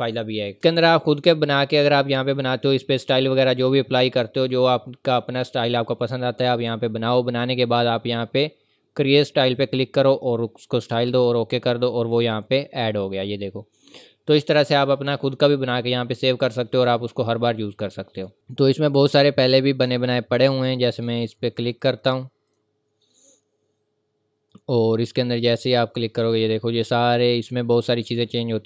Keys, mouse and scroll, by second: 0.5 click, 7.7 click, 18.3 click.